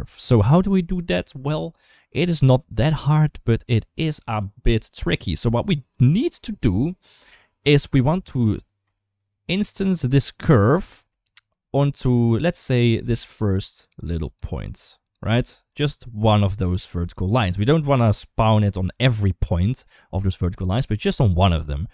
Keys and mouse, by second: 0.2 middle click, 4.0 click, 4.5 g, 5.0 click, 5.2 g, 6.6 shift+middle click, 7.9 shift+middle drag, 8.8 shift+middle drag, 9.1 middle click, 11.1 shift+middle drag, 11.9-12.6 middle drag, 12.8-16.7 typing, 13.0 click, 13.3 click, 13.5 click, 13.7 click, 13.9 click, 14.0 click, 14.3 click, 14.4 click, 14.6 click, 14.8 click, 15.0 click, 15.4 right click.